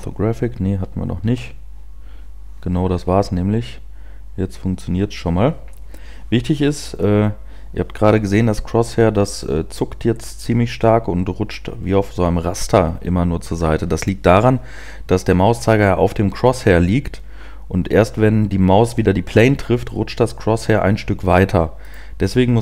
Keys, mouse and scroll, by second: 8.0-13.9 scroll up 1, 22.3 right click.